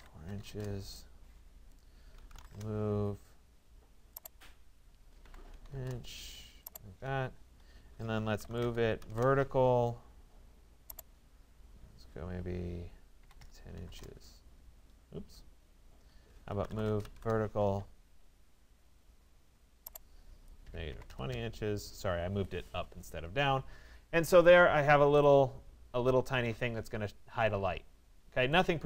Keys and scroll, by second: 0.5 Return, 5.3 1, 5.8 Return, 13.9 Return, 20.7 -, 21.4 Return.